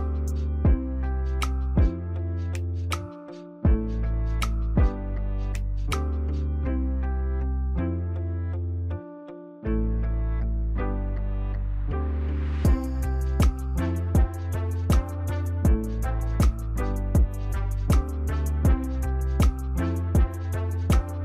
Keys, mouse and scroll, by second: 3.3 ctrl+j, 4.3 ctrl+click, 8.1 ctrl+click, 16.8 ctrl+j, 17.5 ctrl+click, 21.0 ctrl+click.